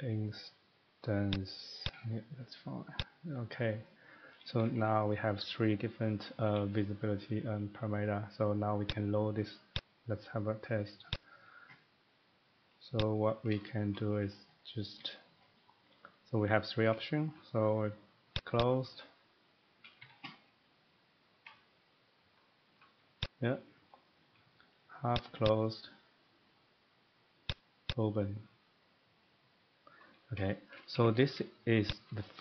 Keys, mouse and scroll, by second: 3.0 click, 4.0 middle click, 4.2 scroll, 4.4 middle click, 4.6 Escape, 4.8 Escape, 5.1 middle click, 6.1 middle click, 7.1 middle click, 8.8 click, 9.7 click, 11.1 click, 13.0 click, 13.4 middle click, 13.9 shift+middle click, 14.6 middle click, 15.4-16.1 scroll down 5, 17.3-20.0 shift+middle click, 18.3 click, 18.6 click, 19.1 middle click, 20.0 Escape, 22.8 shift+middle click, 23.2 click, 23.8 scroll, 23.9 middle click, 24.2 middle click, 25.1 click, 25.4 click, 27.5 click, 27.9 click, 30.1 scroll down 2, 30.3 middle click, 30.7 shift+middle click, 31.0 Escape, 31.1 Escape, 31.2 Escape, 31.9 click.